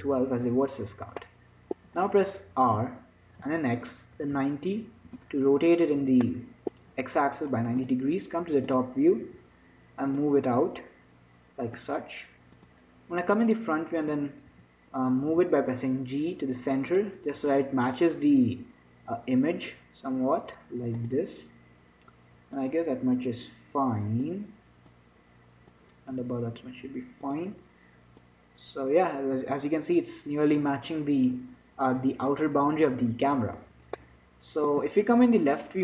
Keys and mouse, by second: 1.5 click, 1.7-5.3 middle drag, 2.2 z, 3.0 r, 6.6-8.1 middle drag, 9.1 click, 9.8 z, 10.6-12.7 drag, 13.7 click, 14.3 z, 14.5-17.7 middle drag, 14.8 z, 15.6 g, 17.7 s, 22.9-27.5 drag, 26.5 s, 28.5-30.4 drag, 30.4-33.7 middle drag, 33.7 z, 34.3 middle click.